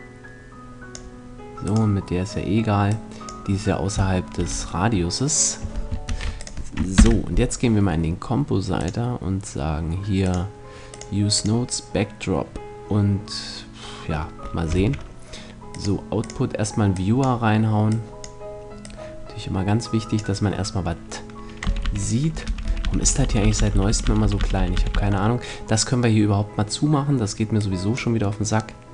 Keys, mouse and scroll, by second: 1.2-2.8 right drag, 2.4-4.4 drag, 3.0 middle click, 4.0 a, 5.5 ctrl+s, 6.7 ctrl+Left, 15.7 shift+a, 24.3 v.